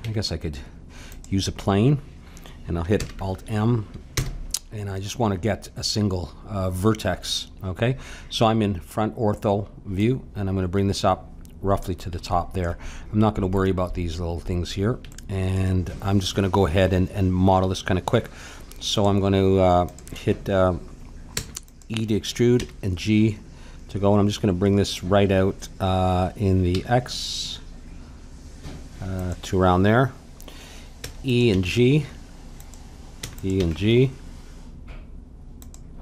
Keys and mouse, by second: 0.0 Tab, 2.9 alt+m, 10.0-11.8 drag, 12.2-18.1 middle drag, 18.9-22.6 drag, 21.3 e, 22.6 g, 31.0 e, 31.5 g, 33.2 e, 33.5 g.